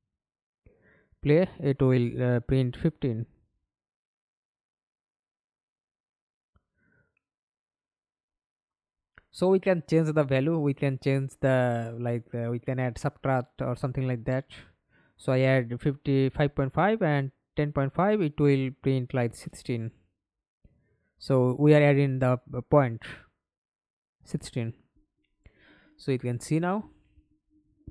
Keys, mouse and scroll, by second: 0.6 Escape, 0.8 middle click, 1.4 F11, 6.5 right click, 7.1 right click, 7.7-8.7 scroll down 1, 9.4 right click, 12.9 BackSpace, 13.9 Return, 13.9 5, 16.5 Right, 16.5 BackSpace, 17.2 5, 17.7 Return, 19.3 double click, 20.8 middle click, 21.4 F11, 21.9 alt+p, 23.2 Escape, 23.5 middle click, 24.1 F11.